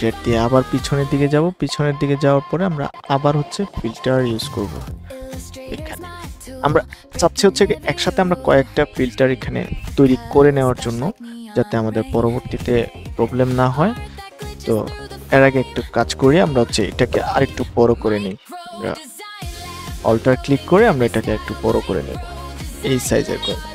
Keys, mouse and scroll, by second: 2.6 click, 15.0 Escape, 16.6 ctrl+t, 17.2-17.6 ctrl+scroll down 1, 18.0 alt+scroll down 1, 18.8-19.9 alt+scroll down 1, 19.9-22.4 alt+drag, 23.5-23.7 drag.